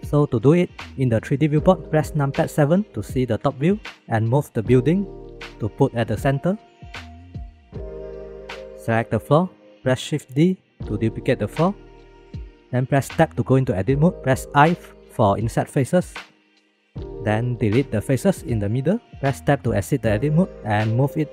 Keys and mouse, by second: 3.4 KP_7, 6.5 g, 8.2 middle click, 9.0 click, 10.8 shift+d, 13.5 Tab, 14.6 i, 17.9 x, 19.4 Tab, 20.7 g.